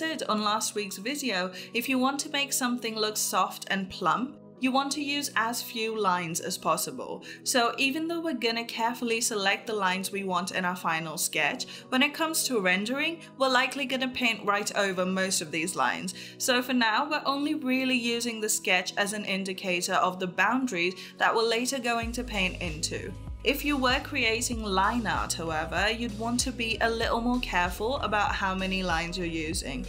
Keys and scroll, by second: 3.4 space, 4.2 ctrl+z.